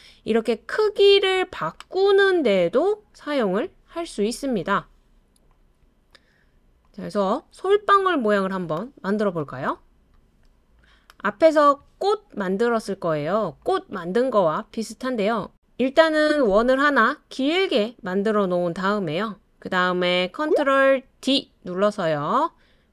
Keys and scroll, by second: 21.3 super+d.